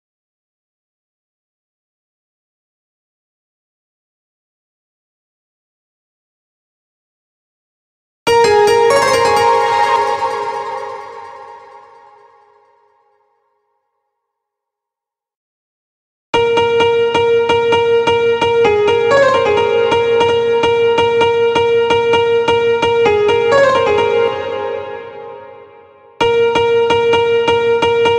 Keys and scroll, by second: 4.9 ctrl+v, 7.6 space, 9.3 space, 15.8 space, 23.7 space.